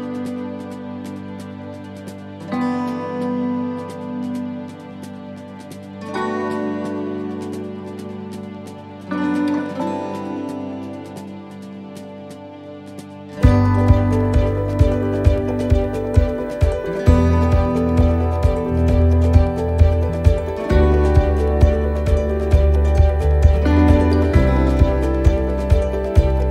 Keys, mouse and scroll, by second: 0.4 shift+middle click, 0.9 middle click, 2.2 shift+middle click, 2.9-15.5 middle click, 4.8 shift+middle click, 15.6 shift+middle click, 16.2-16.5 scroll down 3, 16.5 middle click, 21.2 middle click, 22.8 s.